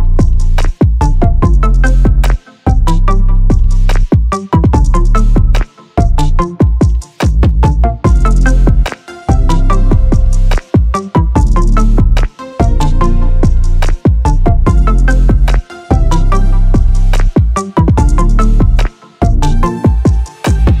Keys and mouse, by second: 0.4-0.8 middle drag, 1.3 click, 2.7 click, 3.5-3.9 middle drag, 4.6-6.0 drag, 8.8 click, 10.9 click, 12.0 click, 13.8 click, 14.8 right click, 16.6-19.5 drag.